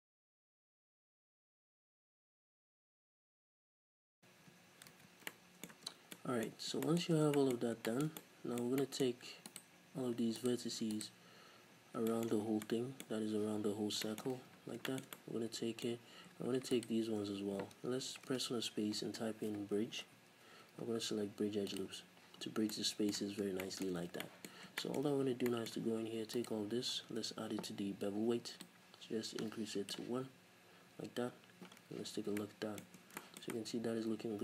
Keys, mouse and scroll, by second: 0.0-4.0 typing, 0.3 shift+middle click, 0.8 shift+right click, 1.0 right click, 1.4 shift+middle click, 1.6 right click, 2.3 shift+middle click, 3.6 shift+right click, 5.0 ctrl+z, 5.3-9.4 middle drag, 5.8 Tab, 5.9 scroll down 1, 6.5 scroll up 1, 7.2 Tab, 7.6 scroll up 1, 9.4 alt+right click, 10.3 alt+right click, 10.9 alt+right click, 11.7 scroll down 1, 12.0-16.7 shift+middle drag, 12.4 scroll down 1, 13.4 z, 14.4 z, 14.5 scroll up 1, 15.9-16.7 scroll up 2, 16.7 alt+right click, 18.2 space, 22.3-22.7 scroll down 2, 22.7-26.7 middle drag, 23.2-23.6 scroll down 2, 23.9 scroll up 2, 24.5-24.8 scroll up 2, 25.0 z, 26.7 alt+right click, 27.2 n, 28.6-32.3 drag, 30.9 n, 31.7-32.3 scroll down 4, 31.9 z, 32.3-34.4 middle drag, 32.9 Tab.